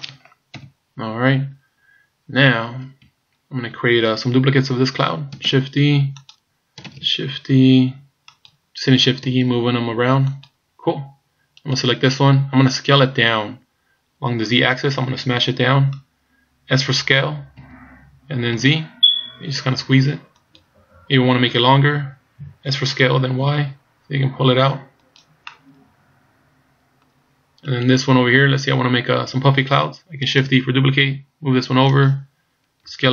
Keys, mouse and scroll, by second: 0.5 KP_3, 1.4-1.9 scroll up 2, 3.2-3.8 shift+scroll up 5, 5.5 shift+d, 7.0 shift+d, 9.3 shift+d, 11.6 right click, 17.6 s, 22.7 s, 25.5 middle click, 27.7 right click, 28.5-28.9 scroll down 2, 30.4 shift+d, 32.9 s.